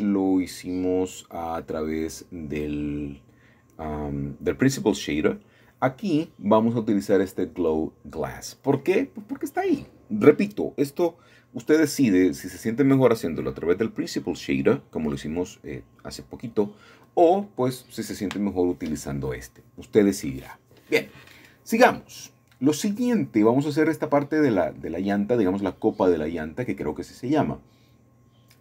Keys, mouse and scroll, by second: 0.9 scroll down 1, 2.5-3.6 drag, 4.3 click, 5.7 Tab, 9.6 middle click, 10.5-11.6 drag, 12.3-13.4 drag, 15.3-16.6 shift+middle drag, 16.6-17.1 scroll up 5, 17.4-19.1 shift+middle drag, 19.8 1, 22.8 ctrl+KP_Add, 23.3 ctrl+KP_Add, 23.7 ctrl++.